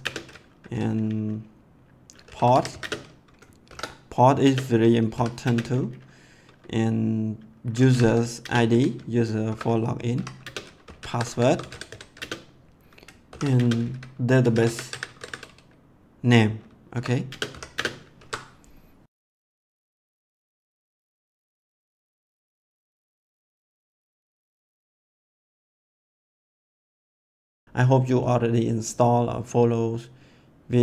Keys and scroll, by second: 2.0-5.4 typing, 7.5-15.7 typing, 16.9 =, 17.2 space, 17.5 ;, 17.7 space, 18.1 ctrl+s.